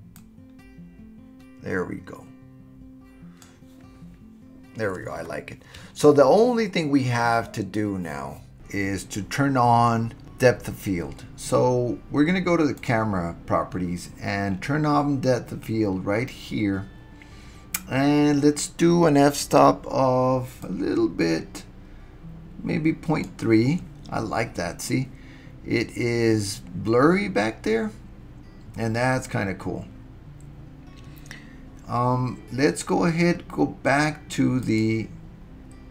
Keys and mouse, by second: 12.8 click, 20.6-23.3 drag, 34.6 click.